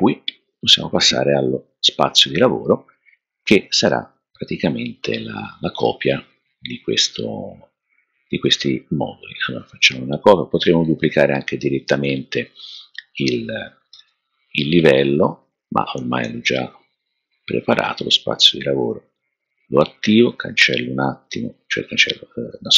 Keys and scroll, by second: 13.9 super+c.